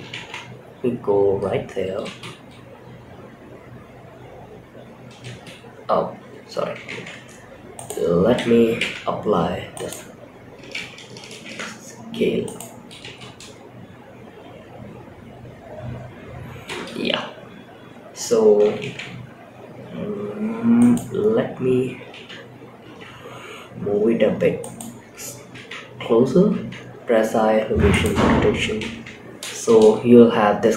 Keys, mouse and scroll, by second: 0.8 scroll down 2, 1.3 space, 4.5 space, 6.2 shift+Left, 6.5-7.1 scroll up 2, 7.1 click, 8.1 ctrl+a, 10.7 ctrl+a, 12.3 space, 16.0 space, 16.7-18.0 scroll down 2, 18.2 shift+Right, 19.0-19.4 scroll down 3, 19.4-20.1 scroll up 3, 20.1 click, 21.3 g, 24.8 i, 25.8 i, 28.2 shift+Left, 28.8 space.